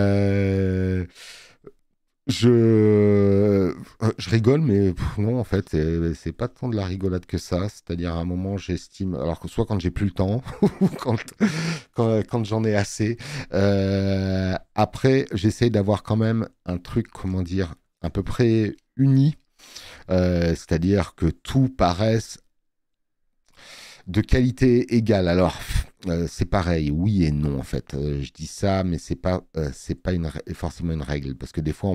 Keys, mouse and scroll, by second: 23.5 space, 23.8 click.